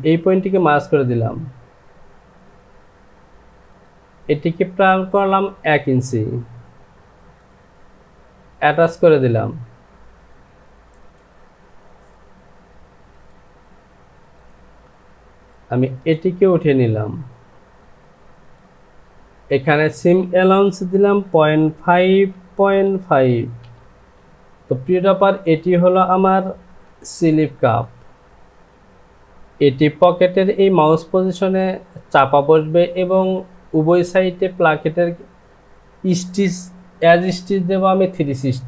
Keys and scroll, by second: 17.8 Home, 22.1 Down, 22.1 KP_Decimal, 22.9 KP_5, 23.3 Down.